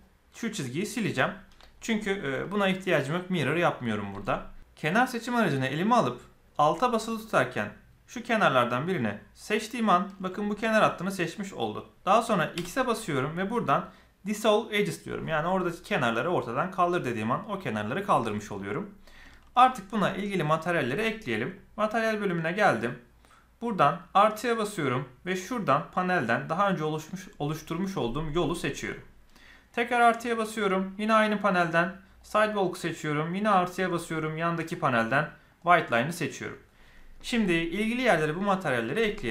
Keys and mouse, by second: 9.3 alt+click, 19.2 shift+middle click, 24.2 click, 25.8-28.4 drag, 30.9-32.2 drag, 33.3 click, 33.7 click, 34.5-35.6 drag.